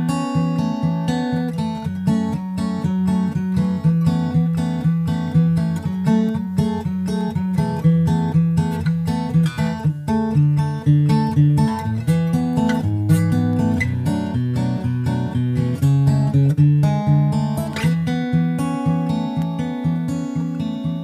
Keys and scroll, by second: 0.3 super+Left, 0.4 shift+super+Right.